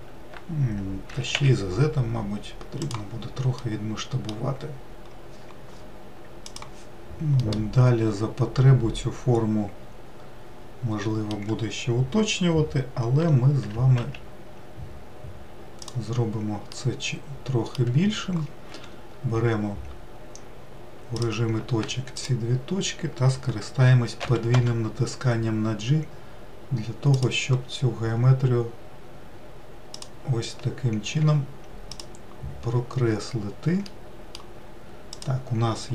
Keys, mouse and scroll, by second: 0.8 s, 3.3-6.3 middle drag, 7.2-10.2 middle drag, 13.4 g, 16.5-18.6 middle drag, 18.6 1, 20.9-22.0 drag, 24.0 g, 29.7 click, 31.0 2, 31.7 click, 32.7 scroll up 2, 33.6-34.9 middle drag, 34.9 click.